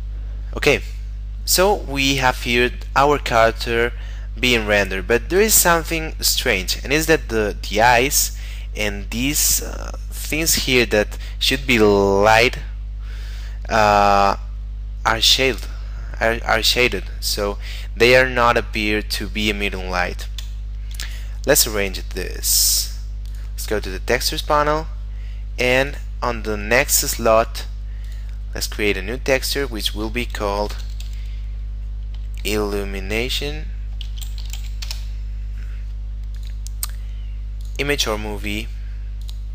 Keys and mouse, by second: 20.5 Escape, 22.3 middle click, 23.4 click, 24.0 middle click, 25.9 click, 28.1 click, 30.6 shift+i, 31.1 u, 32.2 m, 34.0-34.6 typing, 34.9 Return, 36.4 click, 38.5 middle click, 39.3 click.